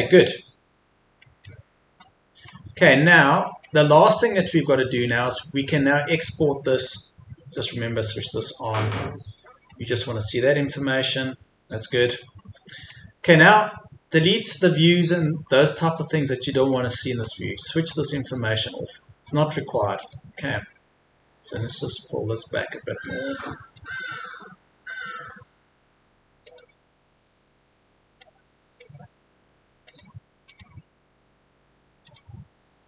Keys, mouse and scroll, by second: 0.7-1.2 scroll up 1, 2.5-3.1 scroll down 1, 3.1 middle click, 3.7-4.3 scroll down 1, 4.3 middle click, 7.5 click, 9.6-12.1 scroll up 1, 12.1 middle click, 12.8-14.2 scroll up 1, 14.2-15.1 scroll down 1, 15.1 middle click, 16.0-16.7 scroll down 1, 16.7-17.3 scroll up 1, 17.9-20.0 scroll down 1, 20.0 click, 32.3-32.8 scroll up 1.